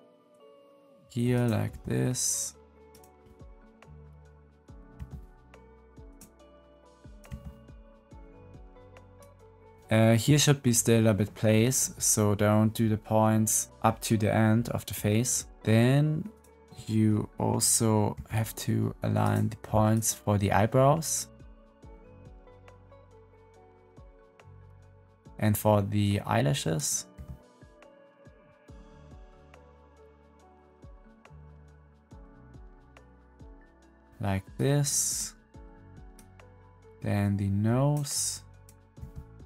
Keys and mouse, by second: 1.3 click, 1.6 g, 4.9 g, 7.0 click, 7.2 g, 18.0 g, 19.8 click, 20.3 g, 22.6 g, 25.9 click, 26.2 g, 27.6 click, 28.0 g, 30.1 g, 31.6 click, 31.8 g, 34.7 click, 36.0-37.8 drag, 37.8 middle click, 38.9 g.